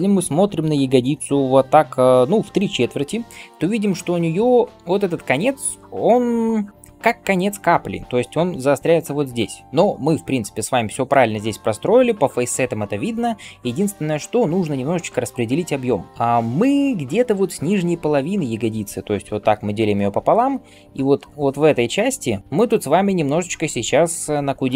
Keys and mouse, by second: 14.8-15.3 typing, 19.2-22.8 d, 23.9 d, 23.9 d.